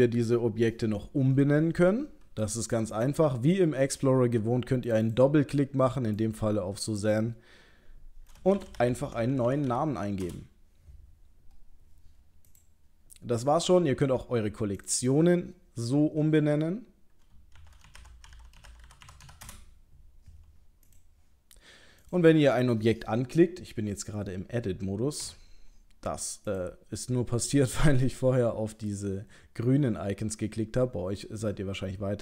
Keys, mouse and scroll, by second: 2.9 click, 4.9 click, 12.5 click, 14.8 click, 14.9 click, 20.9 click, 22.0 click, 25.2 Tab, 26.5 click.